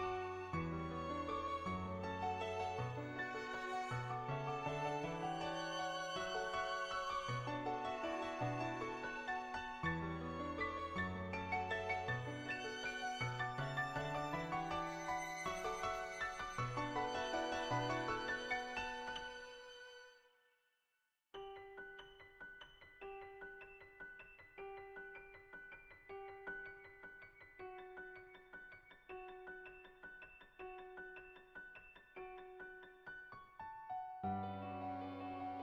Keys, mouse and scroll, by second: 1.0 middle click, 2.1 middle click, 4.1-5.8 drag, 6.5 click, 7.7 click, 13.1 click, 13.5 ctrl+z, 13.8 click, 15.4 click, 16.4 click, 17.8-19.0 drag, 19.6 click, 21.2 click, 21.8 click, 23.1 click, 24.2 ctrl+z, 24.5 click, 24.8 click, 25.6 click, 26.3 click, 27.0 click, 27.2 click, 27.5 click, 27.8 click, 28.2 click, 28.4 click, 28.7 click, 28.9 click, 30.5 click, 30.9 click, 31.5 click, 31.8 ctrl+z, 32.0 click, 32.4 ctrl+z, 32.4 click, 32.7 click, 33.5-35.5 middle drag.